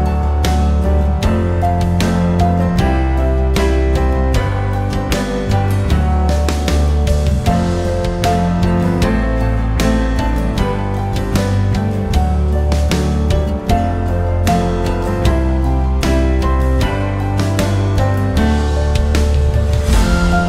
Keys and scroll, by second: 3.9 0, 6.1-7.7 typing, 11.2 3, 11.5 0, 12.0 Return.